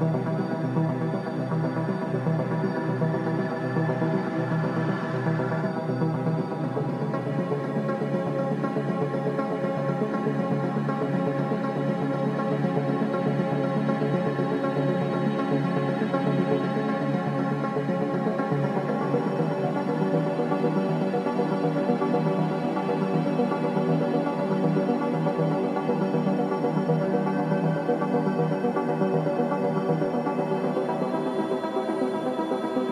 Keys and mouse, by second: 3.5 s, 7.0-7.6 shift+middle drag, 8.6 2, 9.5 click, 10.2 e, 15.0 s, 31.5 ctrl+r.